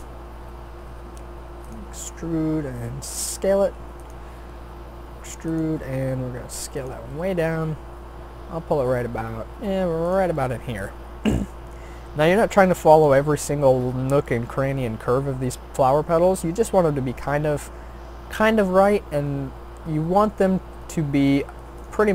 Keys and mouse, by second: 0.2 e, 2.0 s, 4.4 e, 5.8 s, 7.1 g, 11.4-12.4 middle drag, 18.8 middle click.